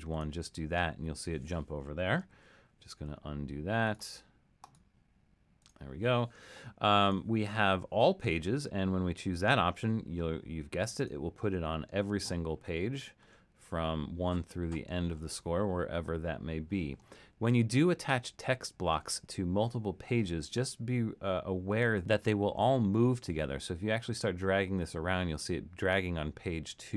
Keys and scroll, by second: 2.3 super+z.